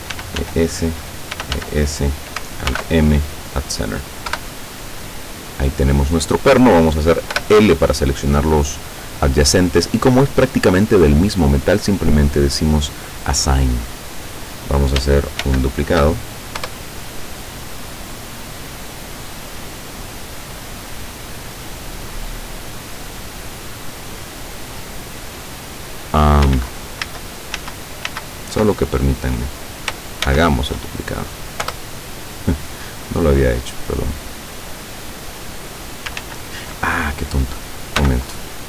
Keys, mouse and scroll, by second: 0.2 e, 0.5 s, 1.2 click, 1.4 e, 1.7 s, 2.1 click, 2.8 alt+m, 3.3 alt+click, 4.4 KP_7, 5.3-5.6 scroll down 2, 6.1-6.5 scroll up 2, 7.4 l, 12.3 click, 13.0 click, 13.9-14.4 scroll down 2, 15.5 shift+d, 16.8 Return, 17.5-20.0 drag, 20.5-22.2 drag, 24.0 click, 25.4 click, 26.6 ctrl+z, 30.3 shift+d, 31.7 Return, 32.5-34.8 drag, 36.3 ctrl+z, 38.1 x.